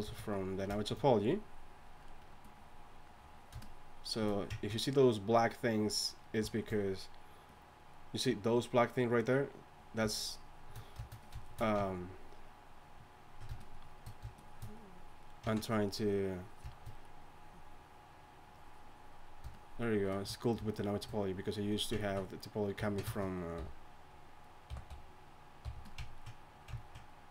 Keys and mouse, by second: 11.4-23.5 drag, 23.5 h, 24.7 g, 25.6 f, 26.7-27.3 drag.